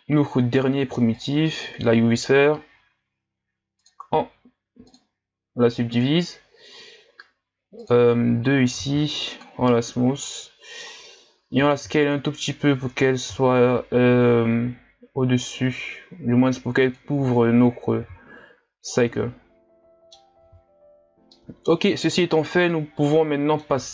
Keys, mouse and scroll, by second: 3.8-8.8 drag, 8.8 w, 10.2-11.5 middle drag, 11.5 s, 18.9-20.5 middle drag, 20.5 z, 20.9-21.3 scroll down 3, 21.3-23.9 middle drag.